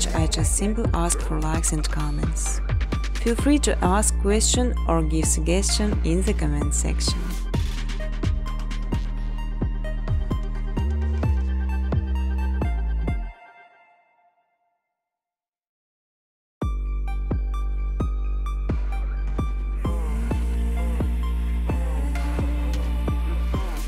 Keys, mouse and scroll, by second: 0.6-2.5 typing, 3.5 Return, 6.6-7.5 typing, 6.7 click, 9.0 click, 9.6-10.4 typing, 9.7 click, 10.7 click, 11.6 space, 12.7 space, 16.7 click, 18.1 click, 21.5 click, 22.1 click, 22.7 space.